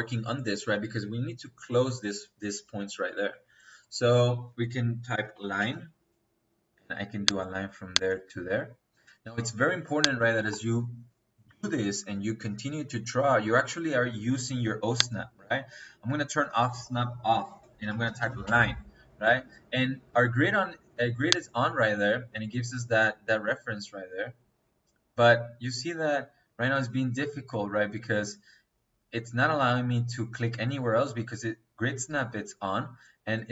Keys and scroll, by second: 5.0 l, 5.3 i, 5.5 n, 5.7 space, 10.3 Delete, 17.3 Escape, 17.7 l, 18.0 i, 18.2 n, 18.4 space.